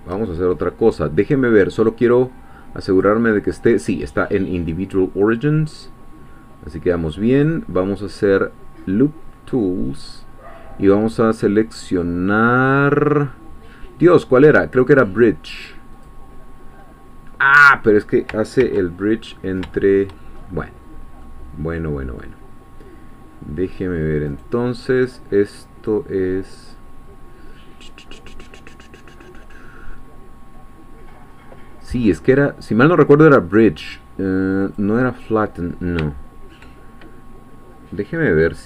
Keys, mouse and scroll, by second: 2.9-5.7 drag, 7.3 right click, 16.0 click, 16.9-17.3 scroll down 1, 17.3 middle click, 18.6 ctrl+z, 19.1-19.6 ctrl+scroll up 1, 19.7 shift+middle click, 20.4-20.8 shift+scroll up 1, 20.8-21.2 scroll down 1, 21.2-22.3 middle drag, 24.3-25.9 right drag, 34.6-36.0 drag.